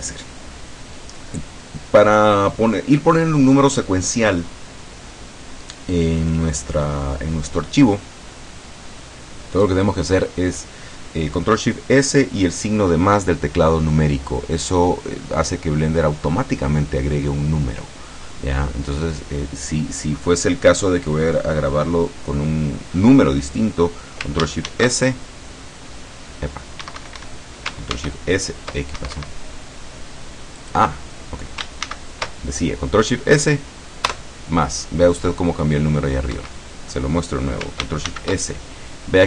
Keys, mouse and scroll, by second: 24.8 ctrl+shift+s, 26.9 Escape, 28.0 ctrl+shift+s, 29.1 Escape, 30.7 click, 31.9 ctrl+shift+s, 34.2 KP_Add, 36.4 Escape, 38.2 ctrl+shift+s.